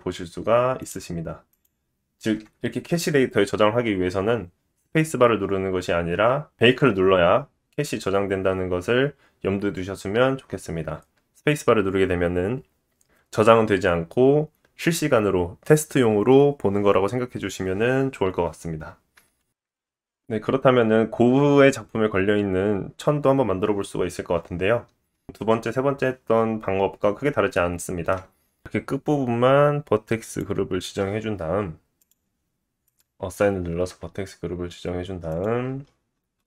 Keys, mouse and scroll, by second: 1.1 space, 4.3 space, 5.1-6.3 drag, 6.4-7.0 drag, 7.1-22.8 drag, 24.6-36.4 drag, 35.8-36.4 scroll down 9.